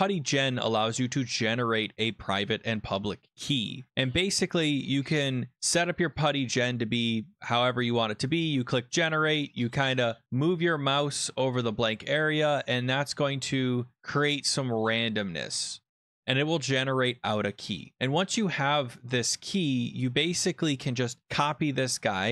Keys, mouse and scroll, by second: 0.9 click, 6.7 click, 8.2 click, 15.2 click, 17.9 click, 20.0-20.3 scroll down 6, 20.3 scroll up 8, 21.2 ctrl+c, 21.7 scroll.